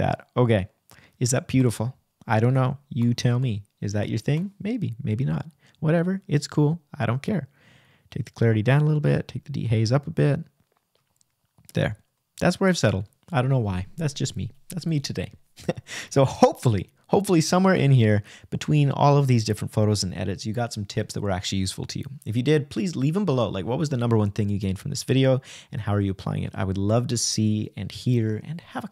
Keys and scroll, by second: 4.4 \, 10.8 Right, 14.5 Right, 16.7 Right, 19.5 Right, 21.9 Right, 23.2 Right, 24.7 Right, 26.0 Right, 27.1 g.